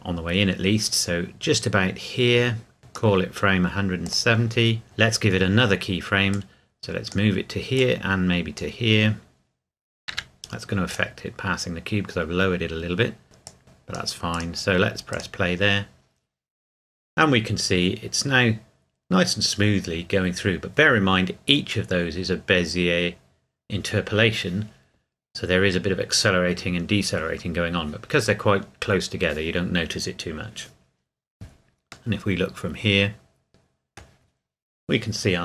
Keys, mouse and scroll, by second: 6.3 click, 10.9 click, 13.4 click, 32.1 middle click.